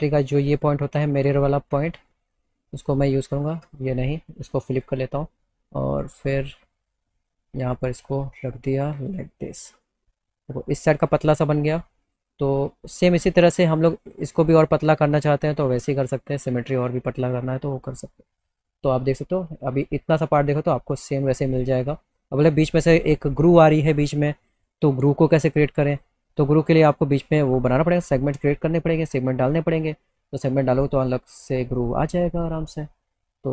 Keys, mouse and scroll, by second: 0.5 click, 1.1 click, 2.6 click, 3.5 ctrl+z, 4.7 click, 6.0-9.5 drag, 12.6 click, 14.1 click, 16.1 alt+middle click, 17.4 alt+middle click, 18.4 click, 19.1 alt+middle click, 23.4 right click, 24.4 click, 25.9 click, 29.6 alt+middle click, 31.0 click.